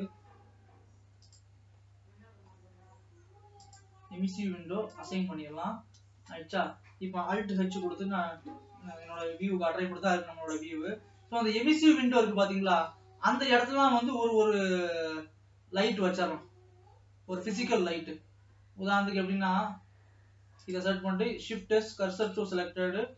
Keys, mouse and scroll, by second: 0.5-1.6 scroll down 1, 1.6 click, 5.4 click, 6.3 KP_0, 8.0 alt+h, 8.6 alt+a, 11.6-12.6 middle drag, 12.6-13.0 scroll up 3, 13.0-14.1 shift+middle drag, 14.1-14.8 scroll up 5, 14.8 scroll down 2, 15.6-16.3 scroll down 3, 16.3 scroll up 2, 16.6-18.9 middle drag, 18.9 scroll down 2, 19.9 scroll up 1, 21.0 click, 21.3 shift+s.